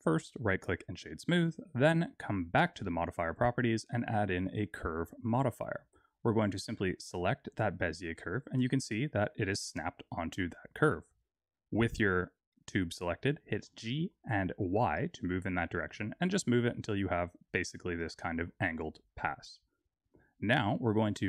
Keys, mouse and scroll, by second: 0.1 right click, 2.5 click, 3.5 click, 6.1 click, 8.1-9.2 scroll down 3, 9.2-10.0 scroll down 1, 13.5 g, 17.9 middle click, 18.7-20.4 scroll up 7, 20.4 click, 20.4 scroll up 2.